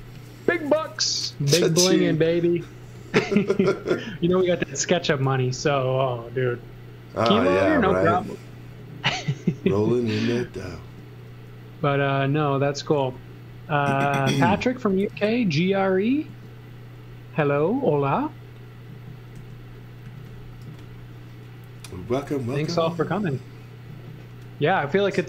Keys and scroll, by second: 2.8 x, 4.4 l, 7.7 space, 7.9 z, 8.7 l, 10.8 e, 14.4 x, 16.3 a, 19.3 e, 20.0 z, 20.6 x, 22.0 z.